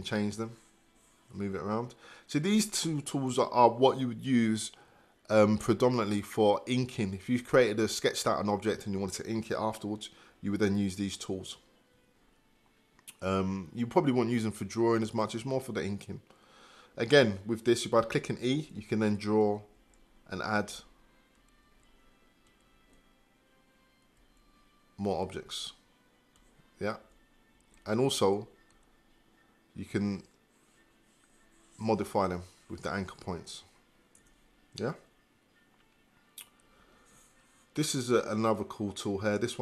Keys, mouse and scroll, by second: 34.2 Return.